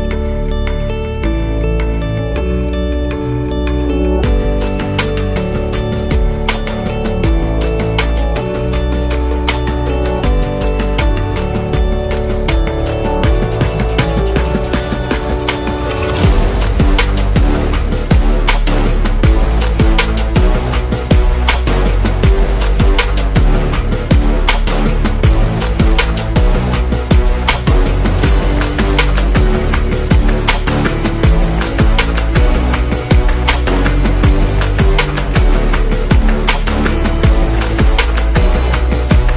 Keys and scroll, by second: 16.7 super+-, 17.5 space, 27.3 z, 28.1 v, 36.6-37.9 typing, 38.1 Return, 39.0 a.